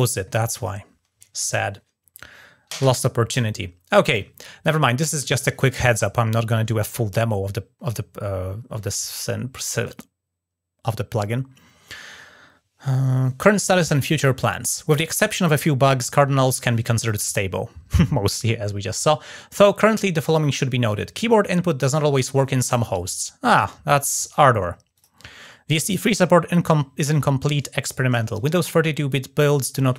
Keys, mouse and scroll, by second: 0.3 click, 7.5-7.9 scroll down 3, 22.7-24.1 drag, 24.7 click.